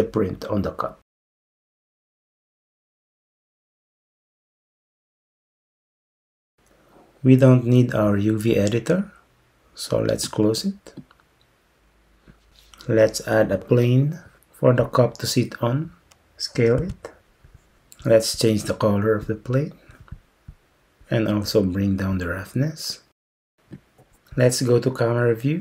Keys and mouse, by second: 10.4 click, 14.0 shift+a, 16.8 s, 23.1 click.